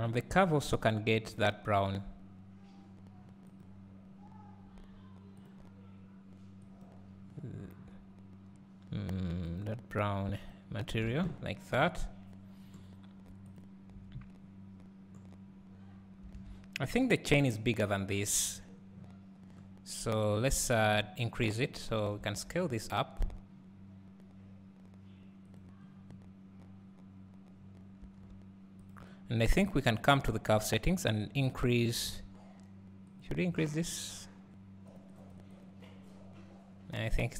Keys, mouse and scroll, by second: 1.4 click, 3.7 click, 5.9-11.1 drag, 11.1 alt+a, 11.5 scroll down 1, 13.6 click, 14.6 scroll down 1, 15.8 scroll up 1, 16.3 alt+a, 16.7 scroll up 1, 18.9 scroll down 1, 26.1 scroll up 1, 28.1 s, 28.9 click.